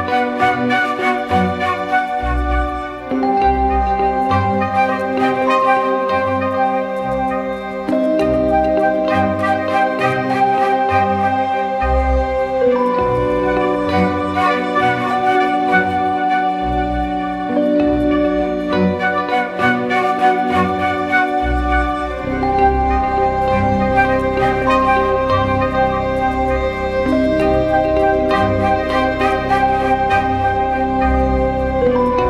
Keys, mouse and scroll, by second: 0.7 alt+shift+click, 4.1 alt+shift+click, 7.3 Return, 8.2 ctrl+t, 8.6 alt+shift+click, 12.9 Return, 13.5 ctrl+t, 14.3 alt+shift+click, 16.4 shift+Return, 17.0 Left, 17.2 Left, 18.3 ctrl+h, 22.1 right click.